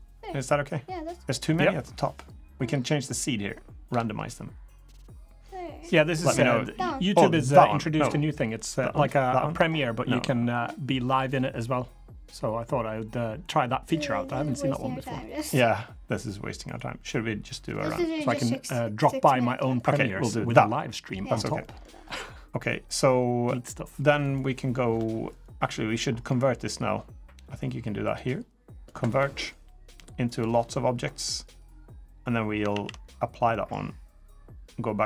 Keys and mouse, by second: 0.2-1.2 middle drag, 2.5-13.9 drag, 14.3-15.2 middle drag, 16.5-19.5 drag, 20.3 middle drag, 21.4 middle click, 24.0 click, 27.9-28.6 drag, 30.1 click, 31.2 click, 32.5 ctrl+a, 33.3 middle drag, 34.0-35.0 drag.